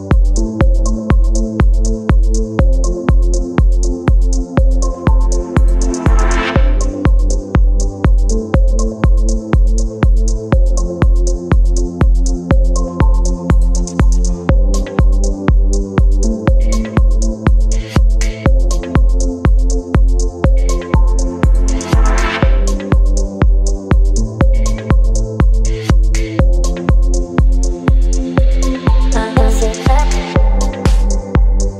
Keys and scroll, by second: 30.7 ].